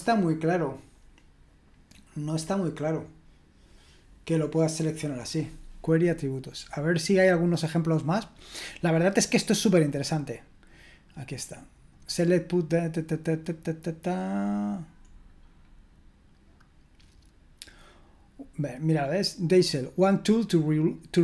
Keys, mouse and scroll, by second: 7.1-11.4 drag, 11.4-11.9 scroll down 1, 11.9-21.2 drag.